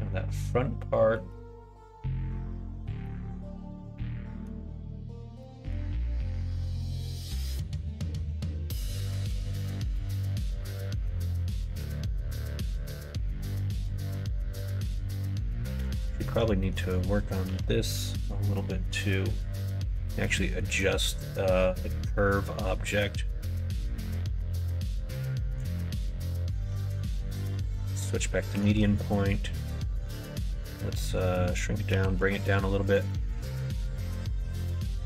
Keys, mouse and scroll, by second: 10.0 middle click, 16.2 Tab, 16.5 middle click, 17.4 l, 20.3 middle click, 24.6 s, 27.6 middle click, 27.6 right click, 28.5 s, 31.9 g, 33.0 middle click, 34.0 s.